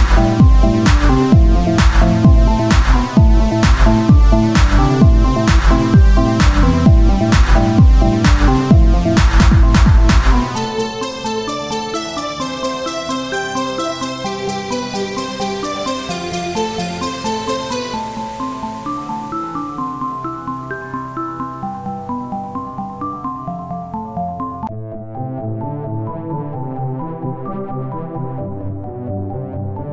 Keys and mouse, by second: 0.9 ctrl+r, 3.2-5.8 drag, 4.0 ctrl+b, 6.0 click, 6.2 z, 6.3-9.6 drag, 6.9 z, 8.7 Tab, 10.0 Tab, 11.2 z, 11.4 c, 13.1 click, 13.6 z, 15.8 r, 18.2 Tab, 21.0 Tab, 22.5-23.5 drag, 23.5 Tab, 26.0 KP_1, 27.4 Tab, 28.2-29.9 drag.